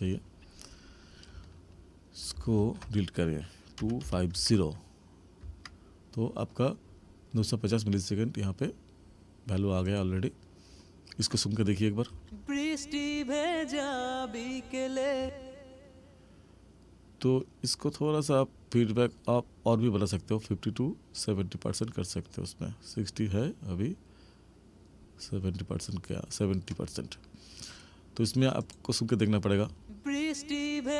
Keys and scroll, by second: 12.0 space, 15.2 space, 29.6 space.